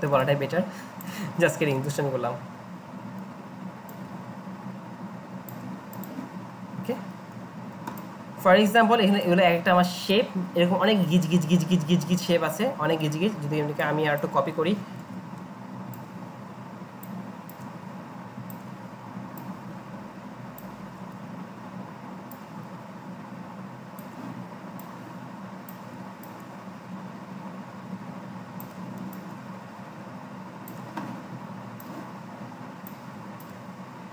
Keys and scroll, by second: 15.0 ctrl+g.